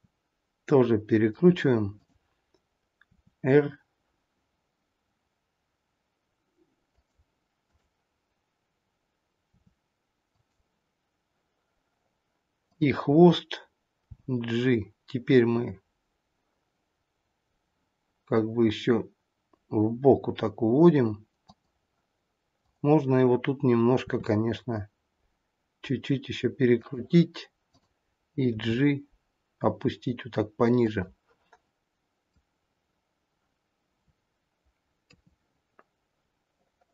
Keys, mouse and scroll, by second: 0.2 r, 1.8 click, 7.5 click, 9.5 r, 12.6 click, 14.2 g, 22.5 click, 24.1 r, 27.6 click, 28.9 g, 35.1 KP_3.